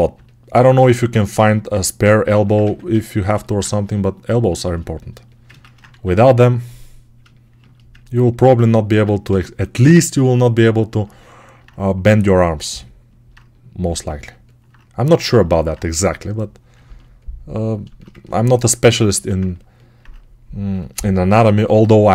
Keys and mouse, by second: 0.7 alt+q, 0.7-3.5 alt+drag, 2.5 1, 3.5-5.1 ctrl+right drag, 5.1-8.2 ctrl+alt+drag, 5.7 2, 8.2-22.1 alt+right drag, 9.1 g, 19.0 alt+q.